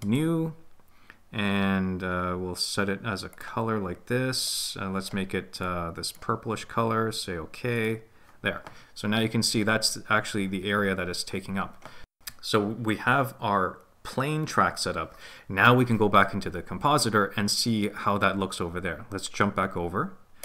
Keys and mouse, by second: 0.2 click, 0.4-7.9 middle drag.